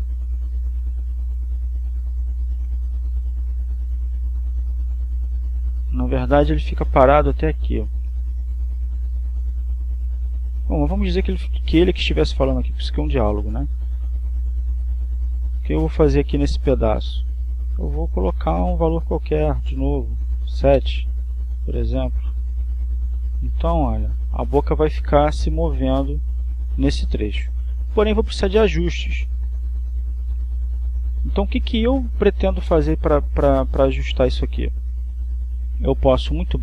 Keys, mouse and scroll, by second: 19.5 click, 21.9 7, 22.3 Return, 24.9-33.0 drag, 33.4-36.6 drag.